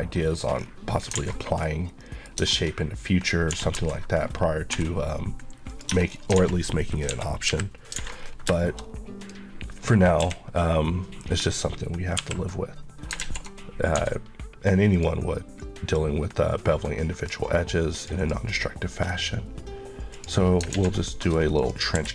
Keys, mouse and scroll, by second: 0.2 scroll down 1, 0.9 scroll down 1, 1.2 alt+a, 1.4 middle click, 2.4 scroll up 1, 3.5-4.8 typing, 5.7 click, 5.9 Tab, 6.1 scroll down 1, 6.4 alt+a, 7.1 KP_1, 7.5 KP_3, 8.0 alt+a, 8.2 scroll down 1, 8.6 shift+middle click, 8.9-9.2 scroll up 1, 9.2 click, 10.3 KP_1, 11.2 scroll up 1, 12.2 KP_9, 13.0 scroll up 1, 13.2 alt+z, 13.6-14.0 scroll up 1, 15.0 click, 18.5 middle click, 18.7 scroll up 1, 20.2 click, 20.8 alt+z, 21.0 middle click, 21.6 click, 22.0 q.